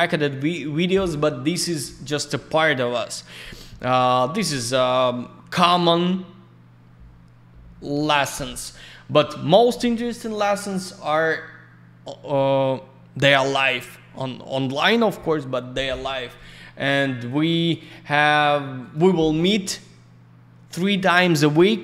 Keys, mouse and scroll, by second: 10.2 click, 16.4 click, 17.3 click, 17.7 click, 17.8 click, 18.8 click, 18.9 click.